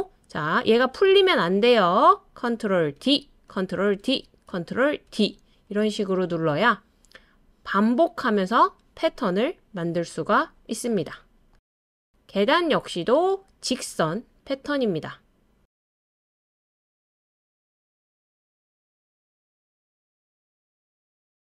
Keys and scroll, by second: 3.0 super+d, 4.0 super+d, 5.1 super+d.